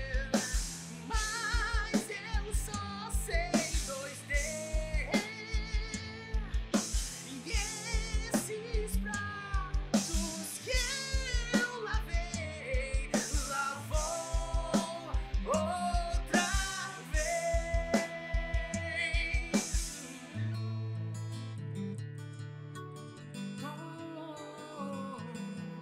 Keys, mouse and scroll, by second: 0.1 scroll down 1, 1.1 middle click, 1.3 KP_1, 1.4 g, 3.0 click, 3.5 g, 4.5 r, 5.9 click, 6.6 middle click, 7.3 KP_3, 7.6 g, 19.9 click, 20.2-22.3 typing, 20.7 click, 22.7 shift+middle click, 22.7 scroll up 4, 22.9 click, 23.3 click, 23.4-25.8 typing, 23.7 middle click, 23.9 scroll up 1, 24.0 middle click, 24.4 middle click, 25.2 scroll up 4, 25.2 shift+middle click, 25.4 click, 25.6 middle click.